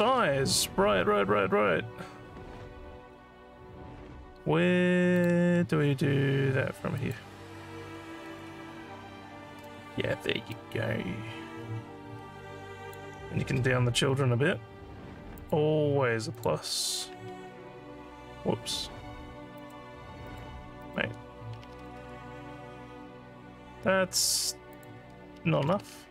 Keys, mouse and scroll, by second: 3.0 scroll up 1, 5.2 click, 6.9 click, 10.2 alt+scroll up 2, 10.5-12.9 alt+drag, 14.1 scroll down 2, 15.4 click, 16.3 click, 19.5 click, 20.2 click, 20.8 click, 24.8 click.